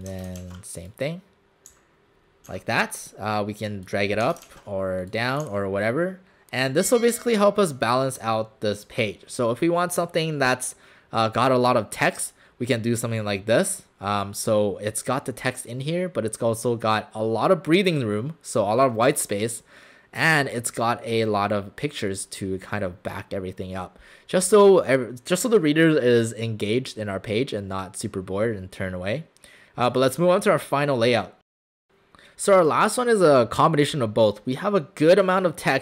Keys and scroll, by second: 0.5 ctrl+alt+shift+c, 1.7 w, 2.5 w, 4.5 ctrl+alt+shift+c, 5.5 w.